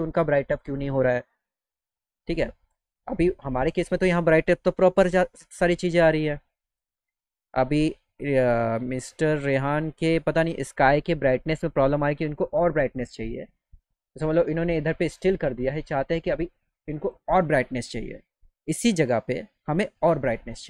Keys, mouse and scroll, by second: 9.0 click, 9.9-11.0 drag, 11.2 click, 15.4-16.4 drag, 18.6 click.